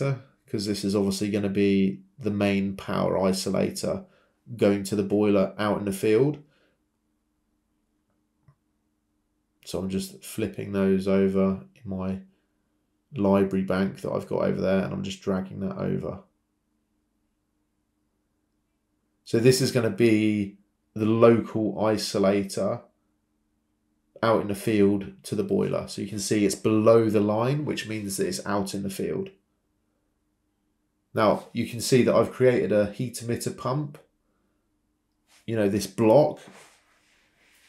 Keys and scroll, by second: 5.7 Escape, 11.7 ctrl+c, 11.9 ctrl+v, 17.9 typing, 18.3 Return, 27.8 ctrl+c, 27.8 ctrl+v, 28.8 Escape, 35.4 ctrl+c, 35.6 ctrl+v.